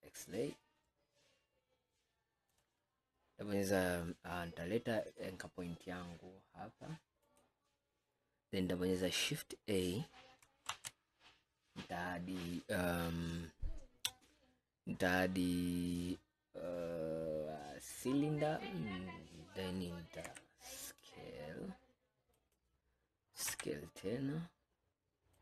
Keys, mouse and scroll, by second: 2.6 click, 5.2-7.5 drag, 10.7 shift+a, 20.4 s, 23.5 s.